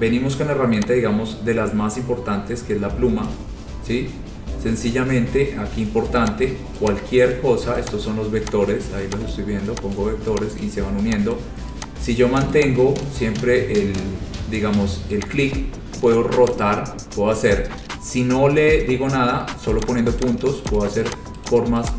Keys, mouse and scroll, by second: 3.4 click, 3.9-4.9 scroll, 6.4 click, 7.5 click, 8.3 click, 8.8 click, 9.5 click, 10.1 click, 10.8 click, 11.5 click, 12.2 click, 13.2 click, 15.6 click, 16.7 click, 20.0 click, 20.3 click, 20.8 click, 21.3 click, 21.6 click.